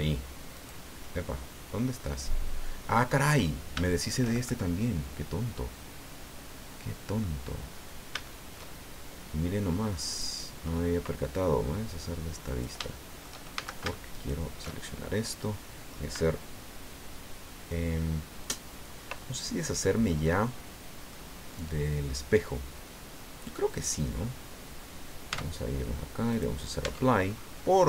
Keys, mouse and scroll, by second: 0.5 right click, 1.0-3.2 middle drag, 3.3-3.6 scroll up 2, 3.8 shift+middle click, 4.8-7.4 middle drag, 7.7 scroll up 1, 8.3 shift+middle click, 10.1 click, 10.6-10.9 scroll up 1, 12.4 click, 12.8 shift+click, 13.5 shift+a, 14.1 alt+shift+right click, 14.8 alt+shift+scroll down 2, 15.2 click, 18.8-19.1 scroll down 2, 19.2-21.3 drag, 25.4 Tab, 26.3 click, 26.8 Tab, 27.3-27.8 scroll up 1.